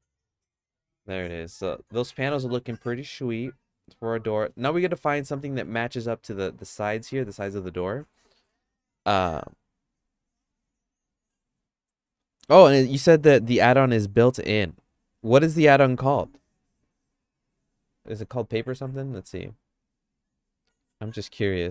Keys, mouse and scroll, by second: 4.7 middle click, 5.4 middle click, 17.5 click, 18.2 click.